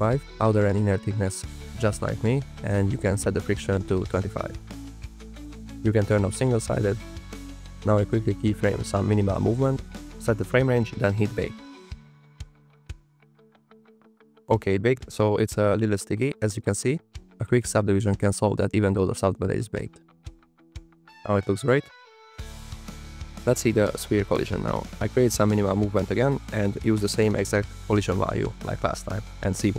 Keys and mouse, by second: 0.3-1.8 drag, 2.6-4.3 drag, 4.9 click, 7.2 click, 8.0 click, 8.3-9.9 typing, 8.8 click, 9.6 click, 10.5 click, 11.1 click, 12.3 click, 13.6-14.3 drag, 14.6 click, 18.0 click, 18.0 space, 20.5 click, 21.9 space, 23.1 click, 24.1-26.5 typing, 24.3 click, 26.9 click, 27.2 click, 27.3 click, 27.8 click, 28.5 click, 28.8 middle click, 29.1 click.